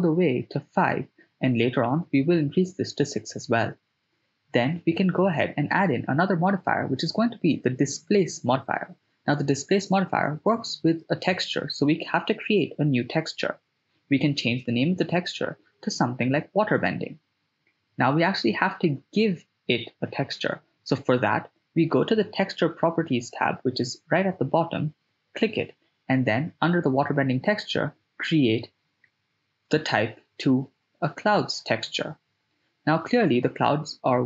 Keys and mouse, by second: 0.1 click, 0.4 click, 2.1 click, 2.4 right click, 2.4 s, 3.3-8.1 drag, 12.7-18.5 drag, 24.7 click, 28.7-29.7 drag, 30.8-31.5 ctrl+middle drag, 31.8-32.5 middle drag, 33.0-33.6 ctrl+middle drag.